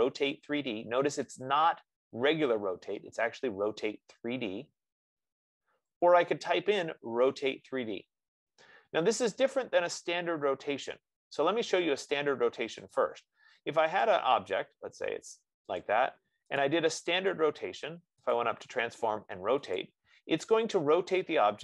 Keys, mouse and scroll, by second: 6.4-8.3 drag, 13.2 click, 14.3 click, 17.0 click, 18.6 click, 20.1 click.